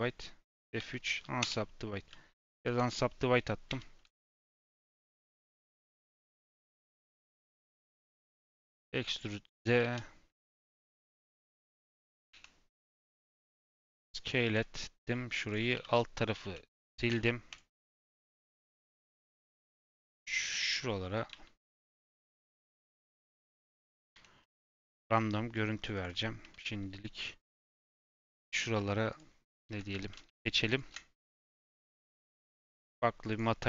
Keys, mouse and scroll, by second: 0.7 F3, 2.6-6.0 typing, 3.1-3.6 scroll down 1, 4.0 click, 6.5 Tab, 6.8 middle click, 7.6 Tab, 7.8 a, 8.4 e, 9.7 ctrl+z, 10.3 g, 10.9 e, 13.1 o, 13.4 s, 14.7-15.0 scroll down 3, 15.0 s, 15.9 middle click, 16.4 ctrl+x, 17.7 middle click, 18.2 ctrl+r, 21.2 s, 22.9 shift+f, 23.3 shift+f, 23.4 shift+f, 24.1 Tab, 24.3 middle click, 24.7-26.2 right drag, 26.2 scroll up 1, 26.3 Tab, 27.6 3, 28.3 alt+click, 29.0 alt+shift+click, 29.4 alt+shift+click, 29.9 ctrl+z, 30.3 alt+shift+click, 30.6 alt+shift+click, 31.5 click, 32.6-33.6 drag.